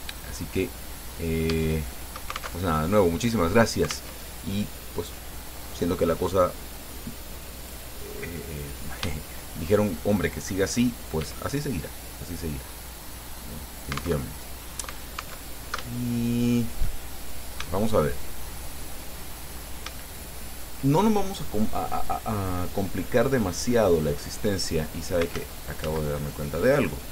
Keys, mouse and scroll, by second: 1.1 middle click, 1.7 shift+click, 2.8 alt+shift+Tab, 4.4 alt+Tab, 7.9 right click, 8.6-10.0 drag, 10.4 shift+click, 11.4 e, 14.0 alt+click, 14.4 alt+Tab, 15.7 alt+Tab, 16.2 shift+click, 17.3 shift+click, 19.5 shift+click, 20.2 shift+middle click, 25.6 ctrl+z.